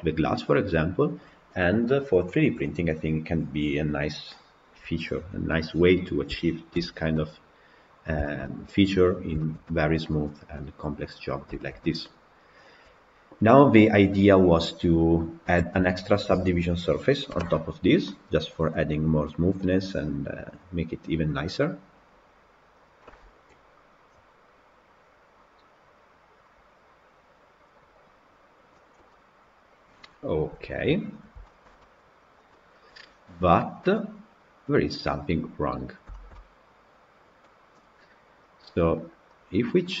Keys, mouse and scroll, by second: 5.9-6.6 scroll down 3, 6.6 alt+b, 7.0 middle click, 8.0 scroll down 1, 8.1 shift+middle click, 9.1 scroll down 2, 9.3-10.3 shift+middle drag, 10.3 scroll down 1, 10.4-15.6 middle drag, 15.6 Tab, 16.5 click, 28.1 click, 29.0-30.8 middle drag, 30.8-31.3 scroll up 1, 31.3-32.1 shift+middle drag, 32.1 scroll up 2, 32.4-33.5 middle drag, 33.5 scroll up 2, 33.8-35.8 middle drag, 35.8 scroll down 2, 36.0-39.2 shift+middle drag, 39.2-39.8 drag, 39.8-40.0 middle drag.